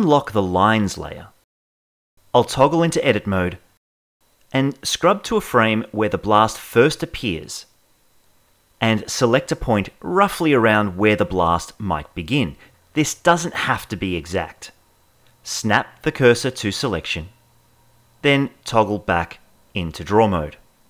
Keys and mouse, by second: 1.1 click, 2.7 ctrl+Tab, 5.6-7.2 drag, 14.8 shift+s, 18.3 ctrl+Tab.